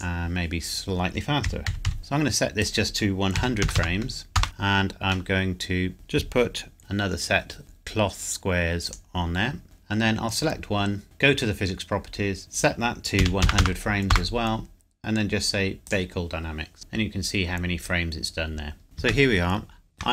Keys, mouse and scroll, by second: 1.4 KP_Decimal, 1.7 KP_2, 1.9 KP_5, 2.0 click, 3.4 KP_1, 3.6 KP_0, 4.4 KP_Enter, 4.4 shift+click, 5.3 middle click, 6.8 g, 8.8 click, 9.3 scroll down 1, 9.6 click, 13.2 KP_1, 13.4 KP_0, 14.1 KP_Enter, 15.9 click, 18.8 shift+middle click, 19.0 scroll up 1, 19.3 shift+middle click.